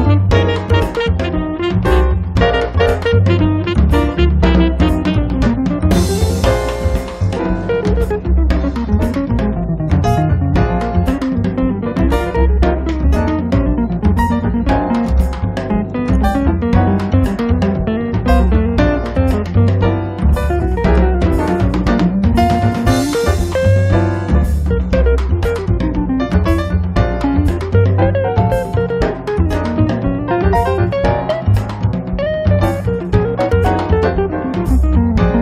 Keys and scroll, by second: 17.3 space, 17.8 Escape, 29.0 2, 31.2 space.